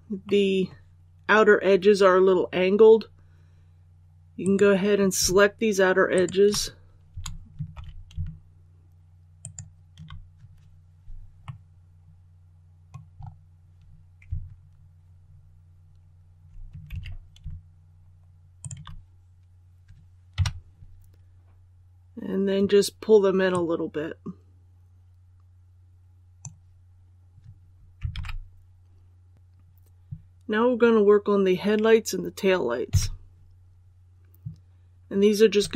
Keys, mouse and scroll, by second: 4.3 right click, 6.0 shift+right click, 7.6 ctrl+z, 9.3 shift+right click, 11.4 middle click, 11.8 scroll up 1, 13.1-13.7 scroll up 1, 16.8 ctrl+z, 18.5 shift+right click, 20.3 KP_7, 21.0 scroll down 1, 23.4-27.1 drag, 28.0 alt+a, 32.8 KP_1.